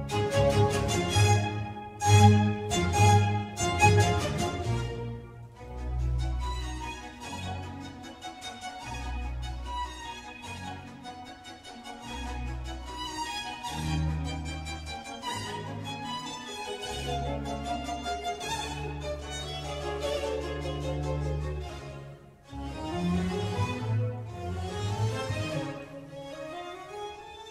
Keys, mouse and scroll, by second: 3.4 click, 5.3 Tab, 5.7 click, 6.7 Tab, 7.6 click, 8.5 Tab, 8.9 click, 9.2-10.6 middle drag, 10.6 click, 11.3 g, 13.7 shift+a, 19.9-23.0 middle drag, 23.2 Tab, 23.7 Tab, 23.9 click, 24.2 Tab, 25.0 Left, 25.2 Left, 25.8 BackSpace, 25.8 q, 27.0 click.